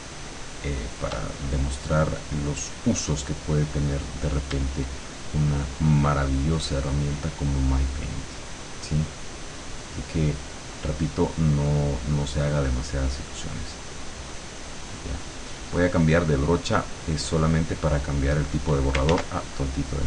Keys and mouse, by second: 6.3-10.9 shift+drag, 12.1 click, 12.7-15.5 drag, 15.9 click, 17.3 click, 18.0 click, 19.1 ctrl+z, 19.9 click.